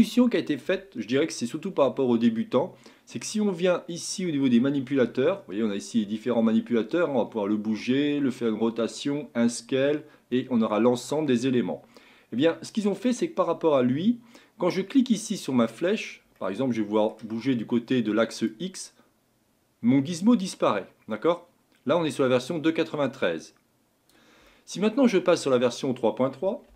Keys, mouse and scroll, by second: 0.2-3.2 shift+middle drag, 13.1-16.2 drag, 16.4-18.5 middle drag, 18.5 click, 24.5-26.7 middle drag.